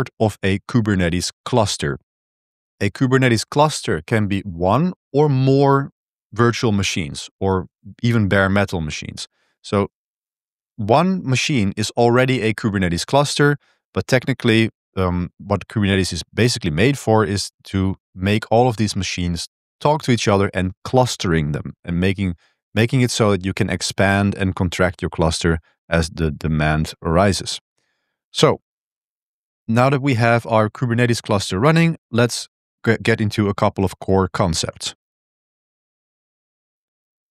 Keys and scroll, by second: 26.3 Return, 26.3 super+3, 26.3 super+1, 28.3 ctrl+b, 28.5 1, 32.0 j, 32.2 j, 32.4 j, 32.5 j.